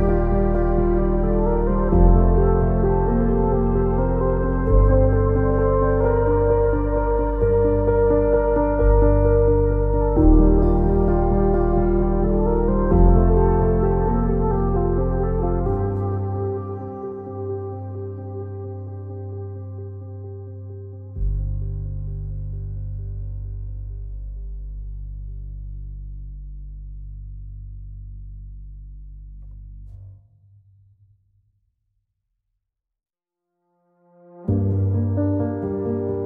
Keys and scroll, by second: 3.0 w, 13.0 t, 14.9 r, 18.5 m, 24.2 w.